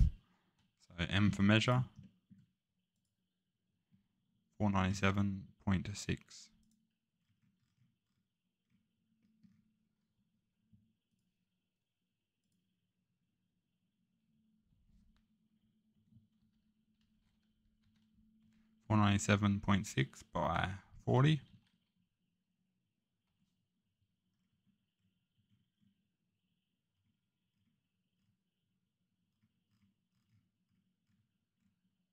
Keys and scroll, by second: 0.9 m, 14.7 Tab, 15.9-18.4 typing, 20.4 Tab, 20.8-21.5 typing, 23.2 Return.